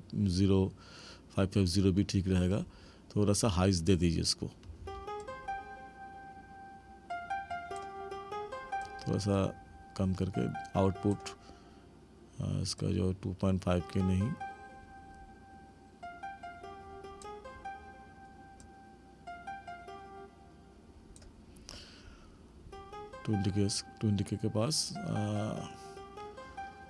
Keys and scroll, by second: 4.7 space.